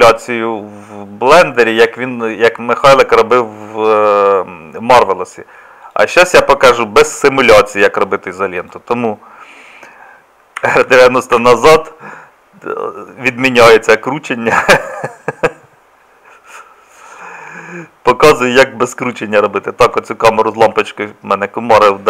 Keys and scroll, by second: 10.6 r.